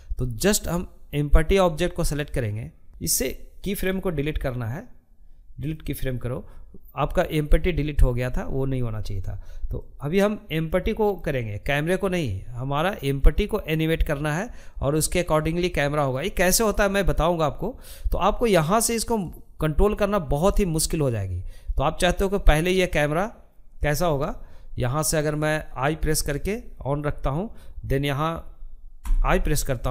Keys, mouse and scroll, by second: 2.9-5.0 right drag, 8.2-27.4 drag.